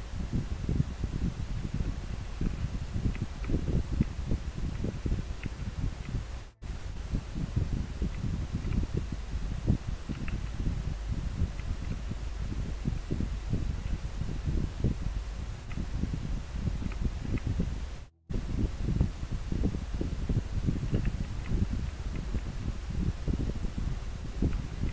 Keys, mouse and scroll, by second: 3.2 scroll down 1, 4.4 scroll up 1, 11.6 scroll down 1, 17.3 scroll down 1, 21.9 scroll up 1.